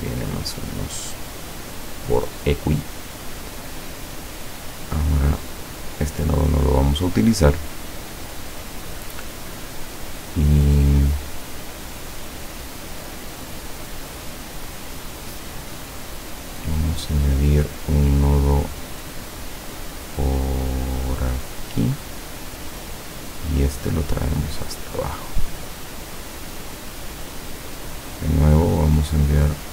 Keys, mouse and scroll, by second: 3.2 click, 4.4 click, 5.9-9.6 drag, 12.8-13.2 scroll up 2, 14.1-14.6 scroll down 4, 15.4 click, 21.4 click, 23.8-27.0 drag, 28.1 click, 28.8-29.4 scroll up 1.